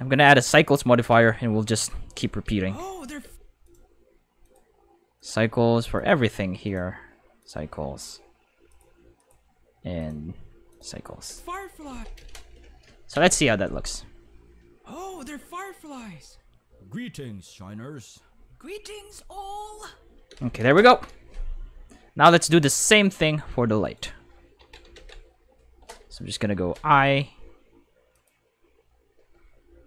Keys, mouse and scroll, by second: 2.1 click, 2.4 space, 2.5 5, 3.2 space, 3.3 5, 3.6 click, 4.4 click, 5.1 click, 5.9 click, 6.6 click, 7.4 click, 8.7 click, 9.1 click, 10.0 click, 10.7 click, 11.3 space, 11.9 space, 12.0 5, 13.1 space, 20.3 space, 20.4 5, 22.4 right click, 23.2 right click, 23.8 right click, 24.6 ctrl+Tab, 24.9 ctrl+5, 26.5 5, 28.1 click.